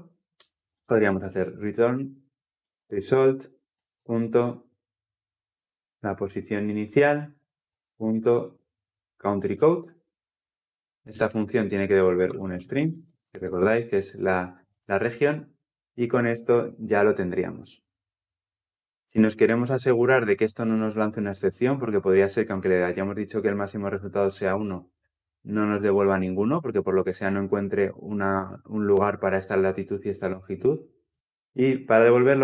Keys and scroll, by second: 13.2 Escape, 16.1 Escape, 16.1 ctrl+alt+l, 16.3 ctrl+alt+o.